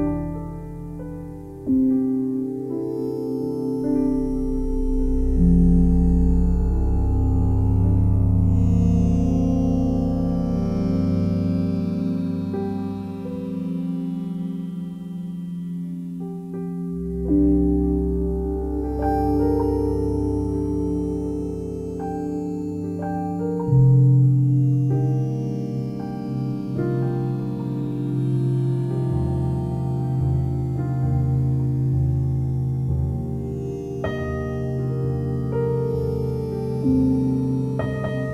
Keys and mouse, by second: 0.0 alt+shift+click, 3.6-6.4 alt+drag, 6.8 click, 8.0 click, 9.1 click, 9.4 alt+click, 11.2 click, 12.0-13.5 shift+drag, 13.5 g, 13.8 y, 14.8 click, 15.2-16.9 alt+drag, 17.1 ctrl+alt+click, 17.6-21.6 alt+drag, 22.3 1, 22.9 ctrl+alt+click, 23.6 alt+shift+click, 24.9-26.5 ctrl+alt+drag, 26.8-28.4 alt+shift+drag, 29.0 ctrl+alt+click, 29.6 shift+click, 30.4-31.7 drag, 34.3 click, 35.4 click, 36.3 alt+a, 36.8 b, 37.1 click.